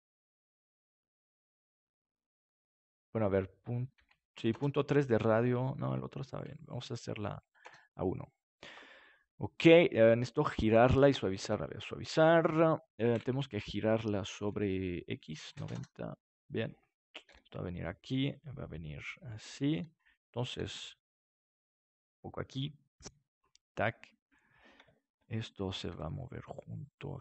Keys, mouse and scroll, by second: 7.0-9.4 drag, 11.2-14.4 drag, 15.3-17.0 drag, 17.2 g, 18.4-21.5 drag, 19.1 r, 20.5 g, 23.7-25.1 drag, 23.7-26.6 right drag, 25.9 g, 27.1-27.2 drag.